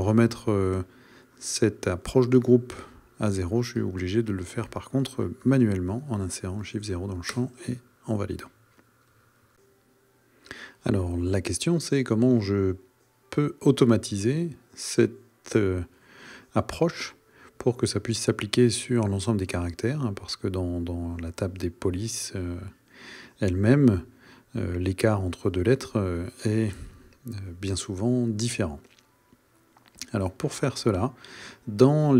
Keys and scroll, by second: 7.3 Return, 31.9 super+a.